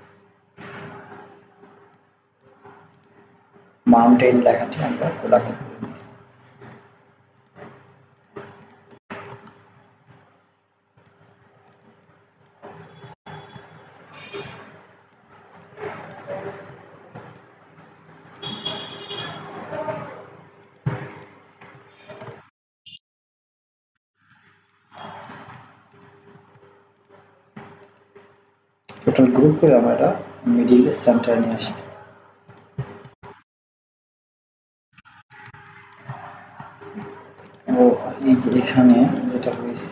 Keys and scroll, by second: 6.0 ctrl+v.